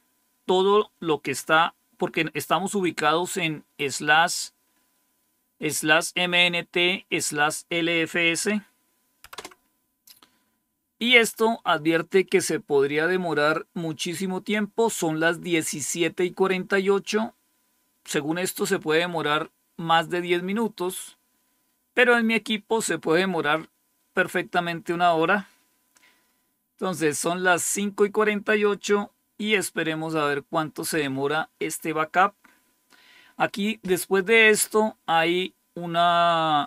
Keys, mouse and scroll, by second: 9.2 Return, 34.1 scroll down 1, 35.7 scroll down 1.